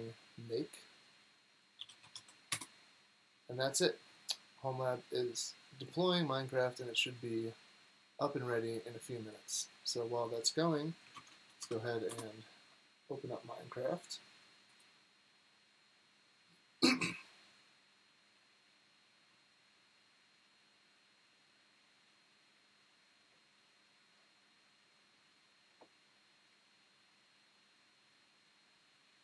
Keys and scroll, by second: 1.5-2.5 typing, 11.0-12.1 typing.